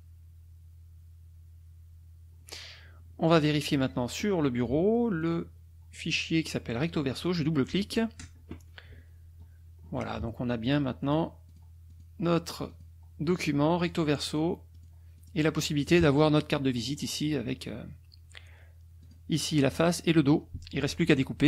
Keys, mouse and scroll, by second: 3.2 click, 5.2 click, 6.7 click, 9.7 ctrl+scroll down 2, 9.8 ctrl+scroll up 2, 10.6 click, 11.0 click, 11.5 click, 11.9 click, 12.7 click, 13.3 click, 13.8 click, 14.3 click, 14.7 click, 15.1 click, 16.1 click, 19.0 click, 19.7 click.